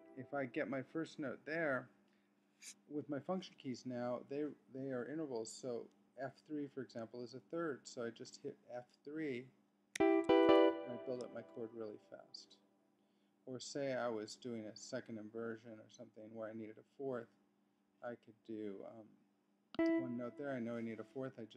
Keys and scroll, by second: 9.9 F3.